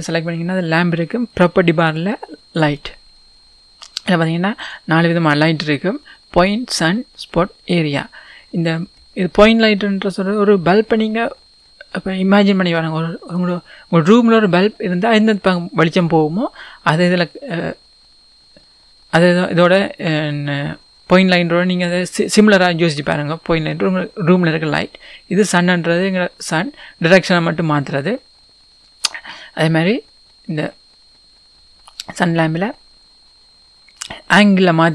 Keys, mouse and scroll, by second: 2.6-4.9 drag, 13.4 click, 25.4 click.